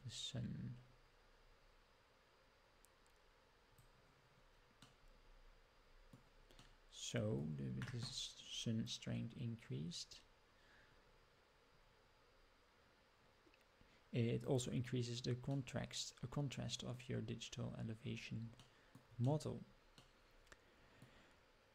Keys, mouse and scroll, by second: 4.9-6.2 middle drag, 6.7-7.5 middle drag, 8.8-14.4 drag, 15.6-17.0 middle drag, 17.2 scroll up 2, 18.7-19.0 shift+middle drag, 19.3 middle click, 20.2-21.1 middle drag.